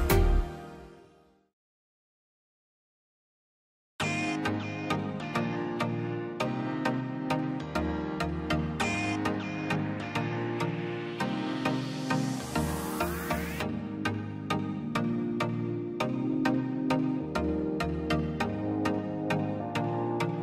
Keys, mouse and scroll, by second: 0.1 ctrl+click, 0.9 ctrl+scroll, 1.0 scroll down 1, 1.1 scroll up 1, 1.3 ctrl+click, 1.4 scroll down 1, 1.7 middle click, 2.1 scroll, 3.0 m, 3.4 click, 3.6-3.9 scroll down 1, 4.4 middle click, 4.7 scroll up 1, 5.8 click, 6.7 scroll up 1, 7.0 click, 8.1 p, 8.3 click, 8.6-8.9 scroll down 1, 8.9 middle click, 9.2 scroll up 1, 9.3 click, 9.9 scroll down 1, 10.1 middle click, 10.4-10.7 scroll up 1, 10.7 middle click, 11.0 scroll up 1, 11.3 click, 11.7 scroll up 1, 11.9 click, 16.6 middle click, 17.0 scroll down 1, 17.5-20.4 drag.